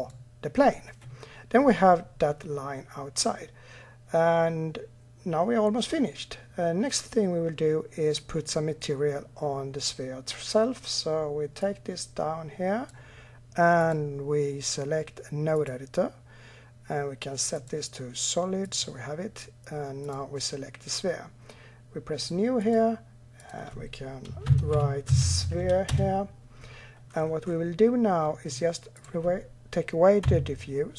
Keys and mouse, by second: 11.4-15.4 drag, 17.4-18.6 drag, 19.9-21.3 drag, 22.0-24.8 drag, 28.8-30.0 drag, 30.0 Delete.